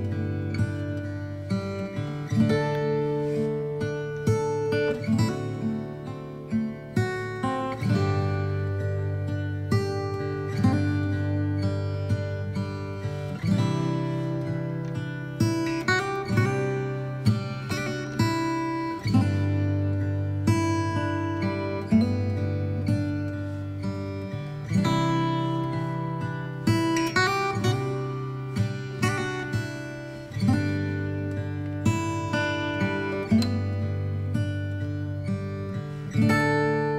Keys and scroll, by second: 7.8 space, 11.0 ctrl+z, 14.2 space.